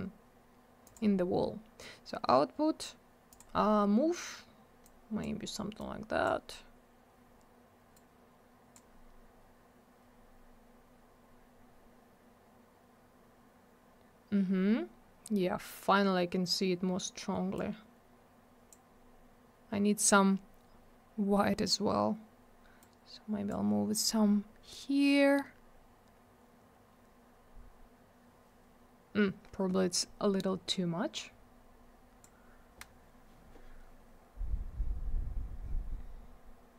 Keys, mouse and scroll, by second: 0.9 click, 0.9 click, 3.3 click, 3.4 click, 4.8 click, 5.8 click, 7.9 click, 10.3-10.9 scroll up 1, 11.6-13.7 scroll down 1, 14.8-15.8 scroll up 1, 17.6 click, 20.9 scroll down 1, 22.8 click, 24.6 scroll up 1, 27.0-29.4 scroll down 1, 31.1 click, 34.4-35.9 scroll up 1, 36.0-36.7 scroll down 1.